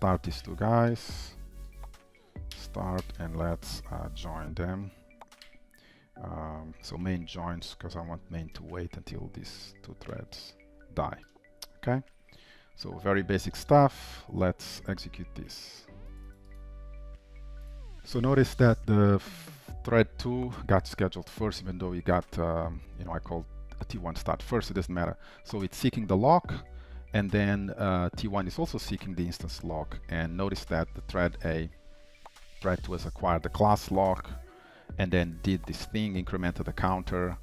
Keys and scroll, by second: 0.4 Return, 10.1 alt+Return, 11.8 ctrl+s, 17.8 ctrl+shift+F10, 18.0 ctrl+shift+'.